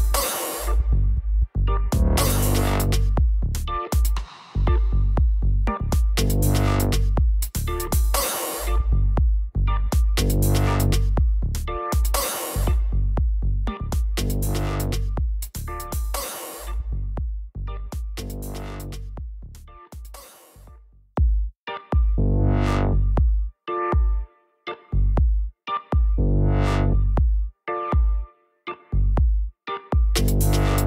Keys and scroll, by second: 1.7 shift+Up.